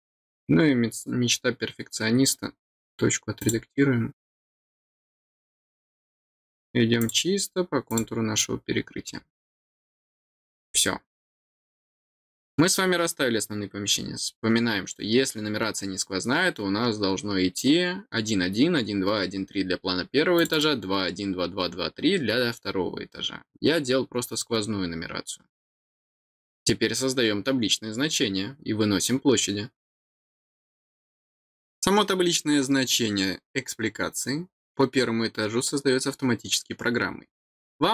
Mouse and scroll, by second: 3.4 click, 5.0 click, 7.0 click, 7.9 click, 9.0-9.4 scroll down 2, 11.6 scroll down 2, 12.0 middle click, 20.3 click, 20.5 click.